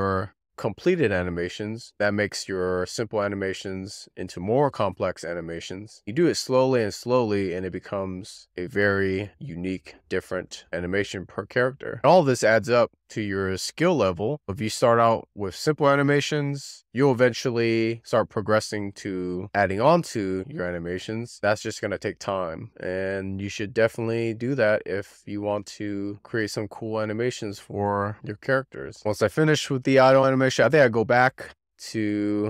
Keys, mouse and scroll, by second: 6.2-6.8 drag, 8.4 click, 9.3-12.1 middle drag, 13.1-14.9 shift+middle drag, 14.9-15.5 scroll up 2, 15.5-16.1 scroll down 1, 16.1-17.4 shift+middle drag, 17.4-19.4 scroll down 1, 30.5 click, 31.1-32.4 drag.